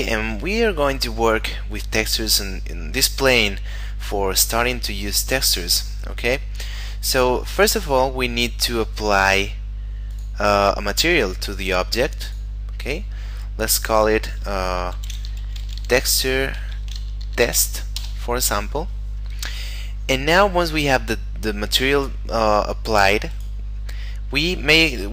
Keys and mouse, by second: 8.6 middle click, 10.1 click, 12.6 click, 15.0-17.6 typing, 18.0 Return, 23.3 right click.